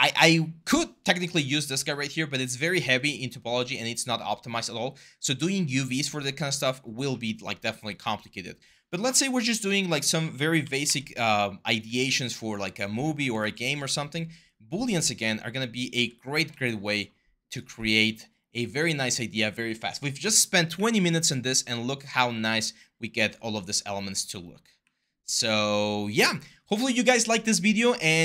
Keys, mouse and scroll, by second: 10.4 ctrl+d, 10.6-12.1 typing, 13.2 ctrl+z, 13.2-13.9 typing, 15.7 typing, 16.1 ctrl+d, 17.2-18.0 typing, 20.5 w, 21.9 e, 24.6 w.